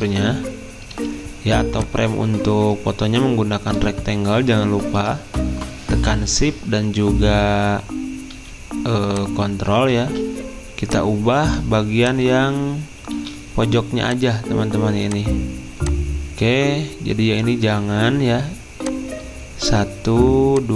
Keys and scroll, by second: 10.0 ctrl+z, 13.2 a.